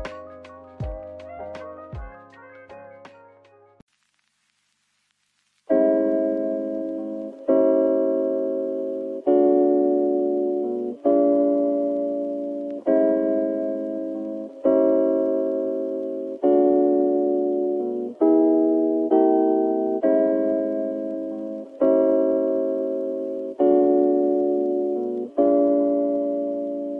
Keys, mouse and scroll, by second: 7.5 middle click, 9.2 z, 14.4 middle click, 16.3 scroll down 1.